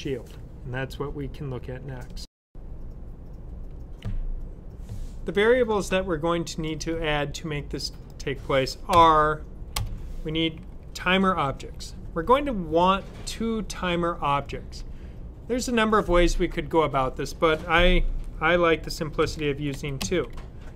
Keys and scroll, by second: 19.1-19.9 typing.